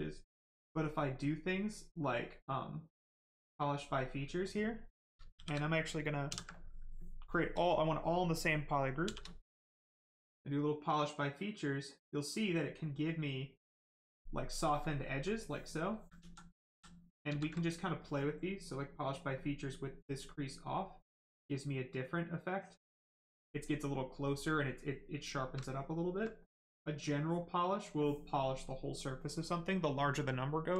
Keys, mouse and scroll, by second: 3.3 click, 5.3 shift+f, 6.2 ctrl+w, 9.0 shift+f, 10.6 click, 13.5 click, 14.2 right click, 14.8 alt+right click, 15.8 ctrl+right click, 16.2 ctrl+z, 17.6 right click, 17.6 right click, 19.0 click, 22.4 click, 23.8 right click, 25.3 shift+right click, 25.9 alt+right click, 26.2 right click, 26.2 right click, 27.2 click, 28.7 right click.